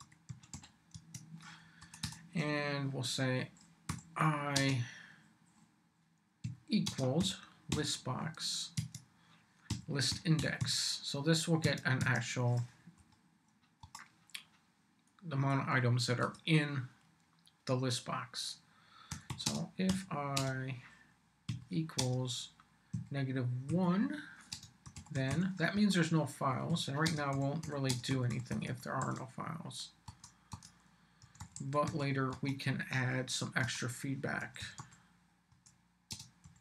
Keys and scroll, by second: 0.0-1.0 typing, 1.8 Return, 3.9 i, 4.5 space, 6.4 =, 6.9 space, 7.2 l, 7.7 b, 8.8 Tab, 9.4-11.1 typing, 11.7 Tab, 13.0 Up, 13.8 Return, 15.5 Return, 18.9-20.3 typing, 21.5-29.5 typing, 31.0-32.4 typing, 33.6 Return, 34.2-36.6 typing.